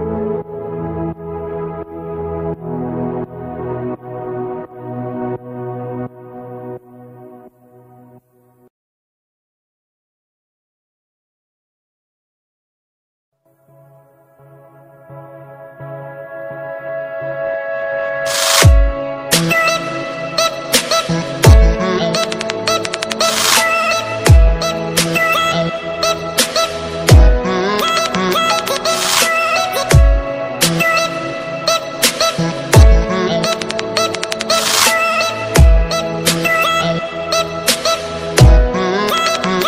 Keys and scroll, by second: 11.0 ctrl+d, 22.6 ctrl+alt+z, 31.0 ctrl+d, 32.3 alt+space.